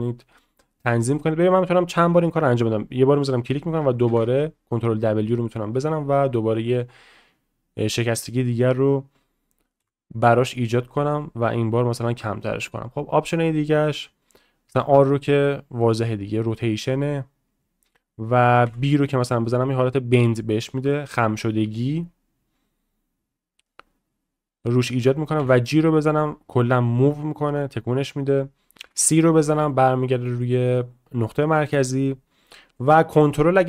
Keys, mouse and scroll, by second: 4.2 ctrl+w.